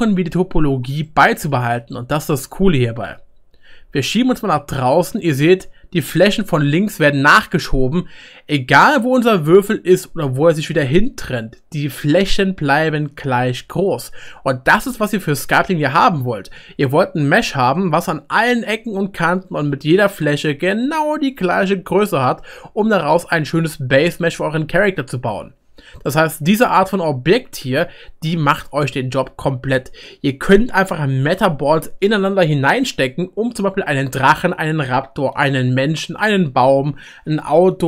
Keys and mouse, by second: 2.3 middle click, 2.7-11.8 right drag, 3.6 g, 4.2 middle click, 4.7 middle click, 4.9 middle click, 8.8-10.7 middle drag, 11.8 middle click, 12.3-13.4 right drag, 13.4 middle click, 13.6-17.9 right drag, 16.1-19.6 middle drag, 19.6 right click, 20.6 middle click, 20.8-28.1 right drag, 21.7 middle click, 22.1 middle click, 28.1-37.8 middle drag, 33.4-37.8 right drag.